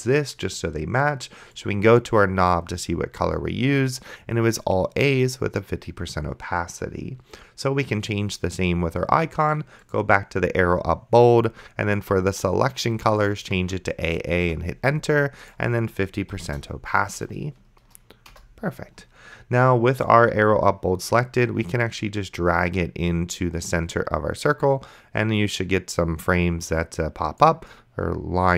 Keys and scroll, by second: 13.7 a, 14.5 Return, 16.3 KP_5, 16.5 KP_0, 18.3 Return.